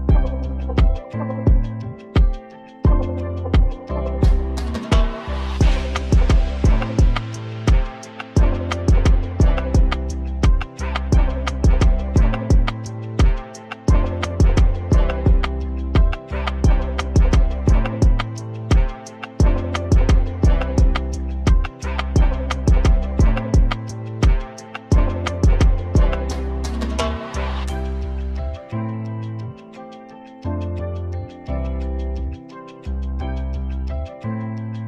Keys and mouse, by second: 4.5 Tab, 5.7 click, 6.9 right click, 7.9 ctrl+z, 8.2 ctrl+z, 8.9-10.0 right drag, 11.0-12.3 right drag, 12.7-13.8 right drag, 14.1 ctrl+z, 15.4 right click, 16.5 right click, 17.5 j, 18.5 ctrl+z, 21.8 j, 22.3-24.4 right drag, 24.4 j, 26.2-27.3 middle drag, 27.3 ctrl+shift+b, 28.8 ctrl+z, 29.6 a, 30.1 right click, 31.4 ctrl+shift+b, 34.2 click, 34.3 click.